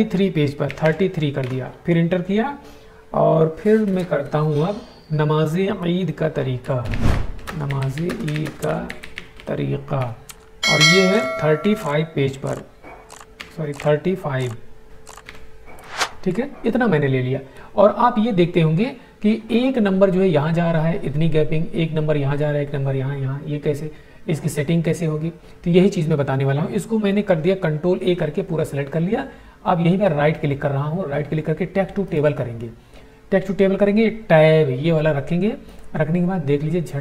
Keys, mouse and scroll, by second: 0.6 typing, 1.3 Return, 6.3-9.6 typing, 9.8 Tab, 11.3 2, 13.1 BackSpace, 13.3 3, 15.2 5, 26.6 ctrl+Num_Lock, 27.9 ctrl+a, 29.8 right click, 32.0 click, 35.6 click.